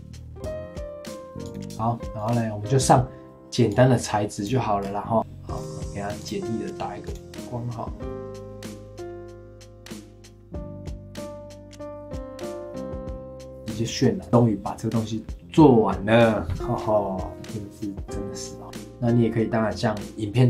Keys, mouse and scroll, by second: 1.7 click, 2.2-4.8 drag, 4.8-5.1 scroll down 2, 5.5 click, 6.2 click, 8.3 click, 8.4 scroll down 6, 8.5 click, 10.0 click, 10.1 g, 10.3 middle click, 10.6 KP_0, 10.8 click, 12.2 click, 12.3 shift+click, 12.4 ctrl+l, 12.6 click, 12.8 space, 13.4 space, 13.4 click, 18.6-20.0 shift+middle drag.